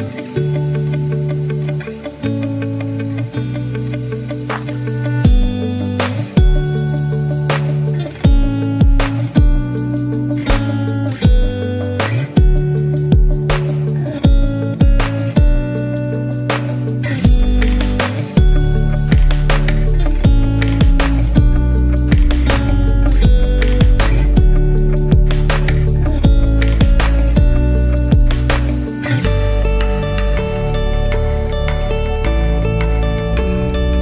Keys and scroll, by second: 10.7 1, 11.5 Return.